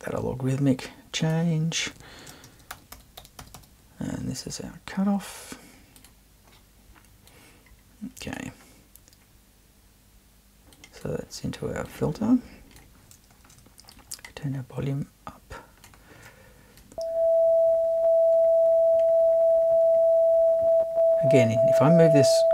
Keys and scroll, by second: 2.2-3.9 typing.